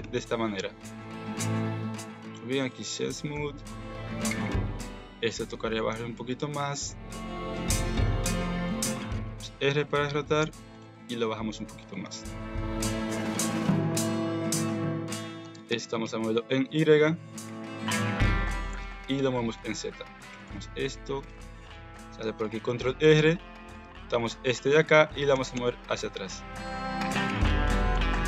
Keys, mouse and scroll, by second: 0.0 Tab, 0.3 middle click, 2.3 click, 3.3 KP_1, 4.3 click, 4.5 Tab, 4.8 alt+z, 5.2-6.3 drag, 6.6 alt+z, 7.5 r, 9.2 r, 10.8 g, 12.0 Tab, 13.0 Tab, 13.6 middle click, 13.9 alt+z, 15.4 g, 17.9 alt+z, 18.2 middle click, 18.6 g, 21.4 ctrl+r, 22.7 click, 23.6 click, 24.0 middle click, 24.3 alt+z, 24.9 alt+z, 25.3 g, 27.7 g.